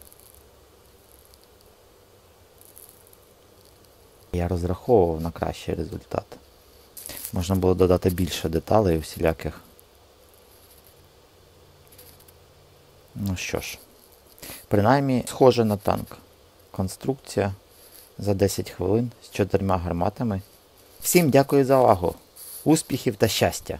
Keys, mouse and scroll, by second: 0.2 middle click.